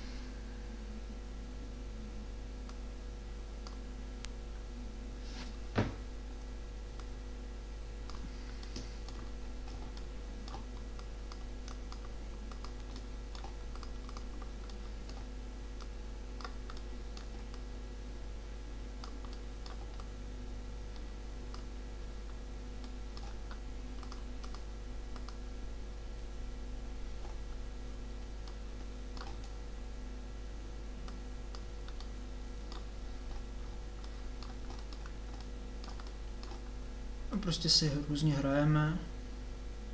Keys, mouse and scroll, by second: 10.9-14.0 drag, 16.0 click, 16.7-18.1 drag, 18.5-20.1 drag, 21.1 click, 21.7 click, 22.3 middle click, 24.1-26.8 drag, 28.5-33.7 middle drag, 34.2-37.7 middle drag, 37.7-39.4 drag.